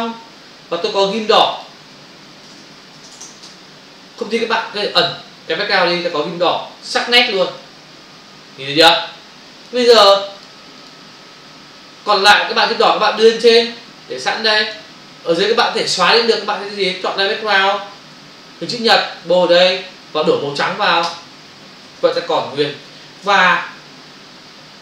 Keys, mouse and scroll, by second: 1.5 click, 1.6 double click, 2.5-3.1 typing, 3.5 Return, 4.6 ctrl+-, 6.1 click, 7.1 v, 7.5 ctrl+space, 7.6 ctrl+click, 7.8 ctrl+space, 10.4 click, 10.5 click, 10.7 click, 10.8 double click, 12.6 click, 12.8 click, 13.6 click, 15.4 click, 15.6 click, 17.4 click, 17.5 click, 18.6 m, 18.9 click, 21.0 ctrl+BackSpace, 23.3 f.